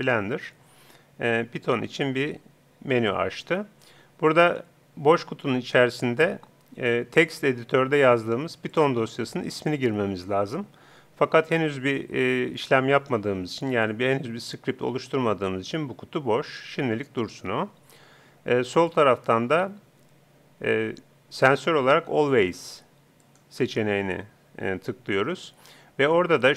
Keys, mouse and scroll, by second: 8.7-10.4 drag, 18.9-20.6 drag.